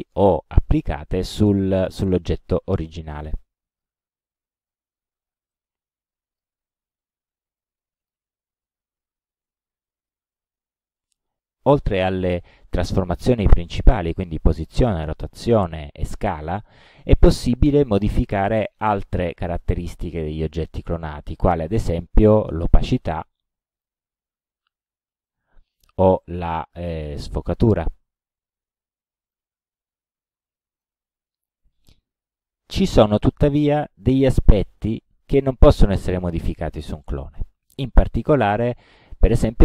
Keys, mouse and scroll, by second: 1.8-2.6 drag, 3.8 click, 5.6-6.6 drag, 7.6-8.3 drag, 9.9-10.3 drag, 11.8-12.4 drag, 18.2 click, 19.4-20.4 middle drag, 22.6 click, 23.8 click, 24.8 click, 27.1-29.6 drag, 30.5 middle click, 32.7 click, 37.8-39.1 drag.